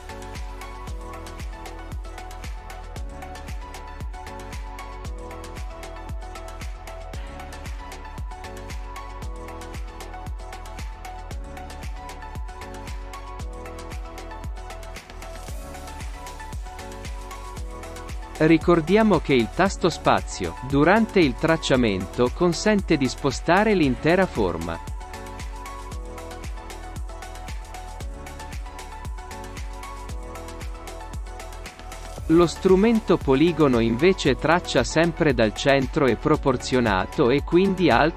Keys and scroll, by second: 21.2 alt+shift+space.